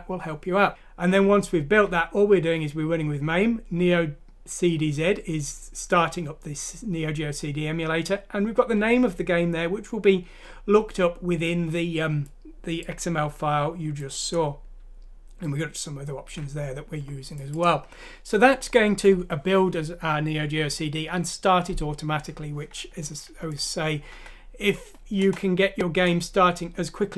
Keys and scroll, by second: 24.1 F6, 25.2 Return.